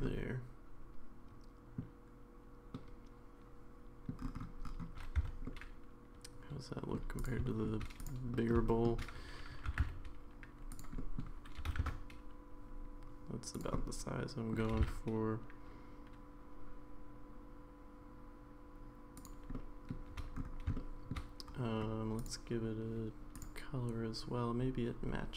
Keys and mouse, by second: 0.0-1.8 middle drag, 2.7-4.1 middle drag, 5.2 Tab, 5.4-6.9 middle drag, 7.2 click, 7.4 shift+middle drag, 8.4 middle drag, 8.7 shift+middle drag, 9.7 r, 11.0 middle click, 11.6 g, 13.8 middle click, 19.5-19.9 middle drag, 20.7-21.1 shift+middle drag.